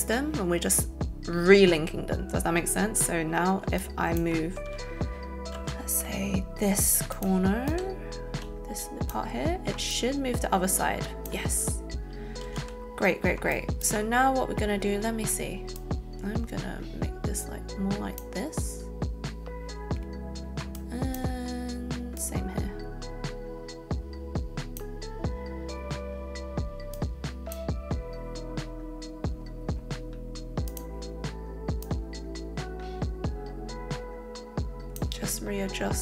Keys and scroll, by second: 5.5 z, 12.4 ctrl+alt+z.